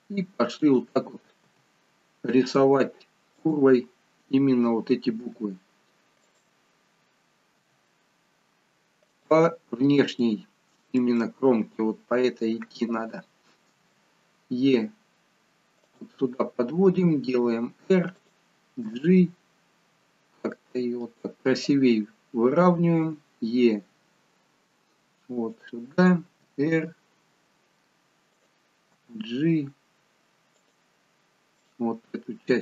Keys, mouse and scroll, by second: 1.4 g, 5.2 r, 7.5 g, 10.1 shift+middle click, 13.7 e, 17.2 r, 18.8 g, 23.2 e, 26.4 r, 28.9 g, 31.6 click.